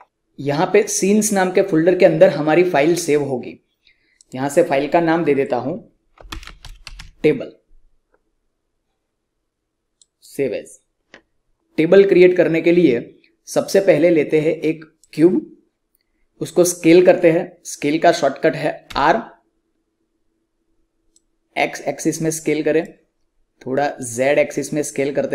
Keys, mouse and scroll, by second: 4.1 click, 6.0-7.4 typing, 9.9 click, 14.9 click, 18.8 r, 21.0-25.3 drag.